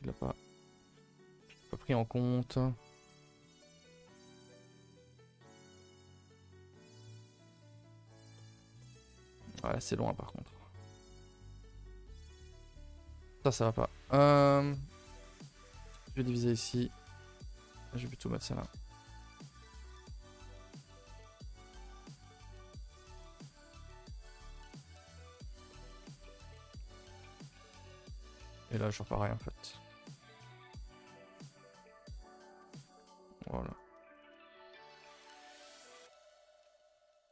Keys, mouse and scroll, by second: 1.3-4.2 middle drag, 5.8 middle click, 5.9 middle click, 6.8 scroll down 2, 7.0 middle click, 7.4 a, 7.6 a, 8.3 middle click, 8.5 scroll down 2, 8.8 middle click, 9.7 k, 12.5 middle click, 13.2 ctrl+z, 13.7 middle click, 14.0 a, 14.2 a, 15.3 a, 15.4 a, 15.9 ctrl+r, 16.7 scroll up 2, 16.9 a, 17.0 a, 17.4 click, 17.8 shift+click, 18.0-21.5 right drag, 21.5 click, 21.8 shift+click, 22.0-23.6 right drag, 23.6 a, 23.8 a, 24.1 ctrl+s, 24.3-24.7 middle drag, 24.9-25.3 middle drag, 25.3-25.7 scroll up 2, 25.7-26.6 middle drag, 26.6 click, 27.0 shift+click, 27.5-28.6 right drag, 28.6 shift+click, 28.9-31.1 right drag, 31.1 a, 31.2 a, 31.7-32.2 middle drag, 32.8-33.4 middle drag, 33.4 2, 33.6 click, 34.1 shift+click, 36.3 click, 37.2 ctrl+Delete.